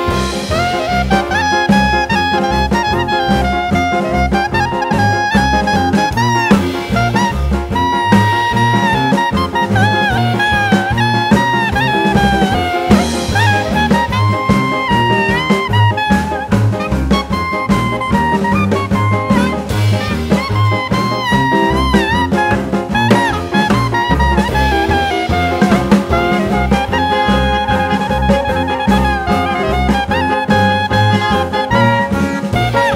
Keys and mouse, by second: 0.4 click, 1.9 click, 4.1 click, 7.6-8.2 drag, 8.9 r, 10.6 click, 12.8 click, 13.0 click, 14.1 r, 15.5-17.1 drag, 17.6 click, 18.4 click, 19.4 r, 20.7-22.4 drag, 23.3-24.2 drag, 24.4 r, 24.8 click, 25.4 drag, 25.7 r, 26.0 click, 26.5 drag, 26.8 r, 27.2 click, 27.9 drag, 28.3 r, 28.7 click, 29.5 click, 29.8 r, 30.1 click, 30.7 drag, 31.0 r, 31.4 click, 32.0 drag, 32.3 r, 32.6 click.